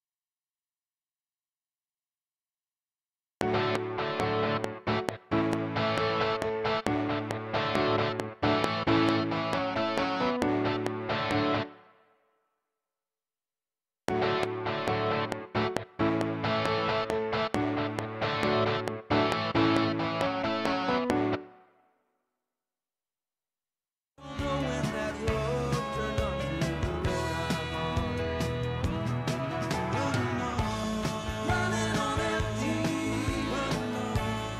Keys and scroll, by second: 3.2 space, 7.6 ctrl+s, 11.6 space, 13.9 space, 15.0 ctrl+s, 21.3 space, 24.2 space, 25.1 Tab, 26.4 Tab.